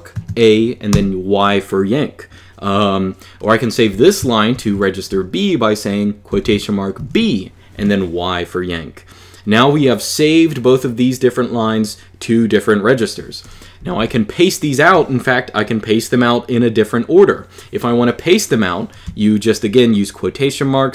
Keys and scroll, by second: 0.7 y, 3.7 j, 4.3 shift+v, 6.1 shift+', 6.7 b, 7.5 y, 13.6 j, 13.7 j.